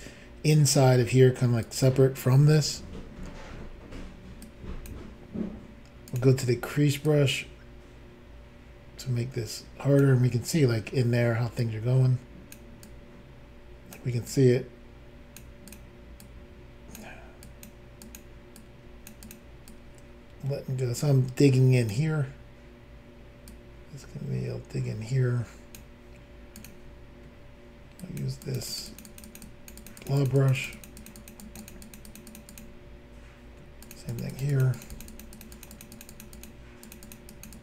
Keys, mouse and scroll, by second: 1.6 click, 4.4 click, 6.1 click, 6.2 click, 7.1 ctrl+click, 11.6 ctrl+click, 12.8 ctrl+click, 14.3 ctrl+click, 15.7 ctrl+click, 17.4 ctrl+click, 18.0 ctrl+click, 18.2 ctrl+click, 18.6 ctrl+click, 19.3 ctrl+click, 19.3 ctrl+click, 19.7 click, 23.5 click, 26.6 click, 26.7 click, 28.0 ctrl+click, 28.2 ctrl+click, 28.4 ctrl+click, 28.6 ctrl+click, 28.7 ctrl+click, 28.8 ctrl+double click, 28.9 ctrl+click, 29.0 ctrl+click, 29.1 ctrl+click, 29.2 ctrl+double click, 29.3 ctrl+click, 29.4 ctrl+click, 29.4 ctrl+click, 29.8 ctrl+click, 29.9 ctrl+click, 30.0 ctrl+click, 30.1 ctrl+double click, 30.2 ctrl+click, 30.3 ctrl+click, 30.4 ctrl+click, 30.5 ctrl+double click, 30.6 ctrl+click, 30.7 ctrl+click, 30.8 ctrl+click, 30.8 ctrl+double click, 31.0 ctrl+click, 31.1 ctrl+click, 31.2 ctrl+click, 31.3 ctrl+double click, 31.4 ctrl+click, 31.6 ctrl+click, 31.6 ctrl+click, 31.7 ctrl+double click, 31.9 ctrl+click, 31.9 ctrl+click, 32.1 ctrl+click, 32.2 ctrl+double click, 32.3 ctrl+click, 32.4 ctrl+click, 32.5 ctrl+click, 32.6 ctrl+double click, 33.8 ctrl+double click, 33.9 ctrl+double click, 34.1 ctrl+click, 34.2 ctrl+double click, 34.3 ctrl+click, 34.4 ctrl+click, 34.5 ctrl+click, 34.6 ctrl+double click, 34.7 ctrl+click, 34.8 ctrl+click, 34.9 ctrl+click, 35.0 ctrl+double click, 35.1 ctrl+click, 35.2 ctrl+click, 35.3 ctrl+click, 35.4 ctrl+double click, 35.5 ctrl+click, 35.6 ctrl+click, 35.7 ctrl+click, 35.8 ctrl+double click, 35.9 ctrl+click, 36.0 ctrl+click, 36.1 ctrl+click, 36.2 ctrl+double click, 36.3 ctrl+click, 36.4 ctrl+click, 36.8 ctrl+click, 36.9 ctrl+double click, 37.0 ctrl+click, 37.1 ctrl+click, 37.3 ctrl+click, 37.4 ctrl+double click, 37.5 ctrl+click.